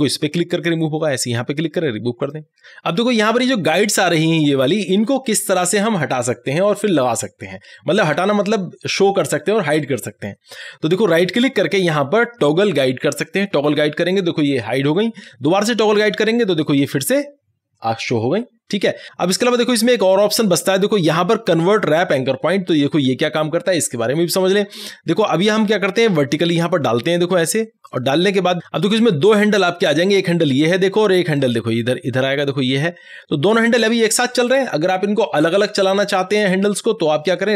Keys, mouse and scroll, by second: 0.6 right click, 2.3 click, 11.3 right click, 13.2 click, 15.3 right click, 16.7 click, 19.1 click, 19.5 right click, 26.5 click, 29.0 click, 29.0-37.5 drag.